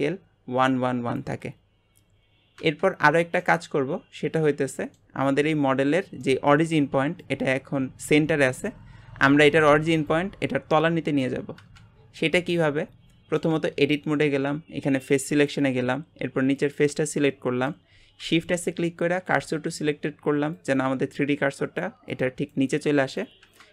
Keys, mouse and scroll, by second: 3.4-5.5 middle drag, 5.5-6.2 scroll up 1, 6.2-11.9 middle drag, 12.2-13.8 middle drag, 13.8 Tab, 15.3-16.7 drag, 17.3 middle click, 18.2 shift+s.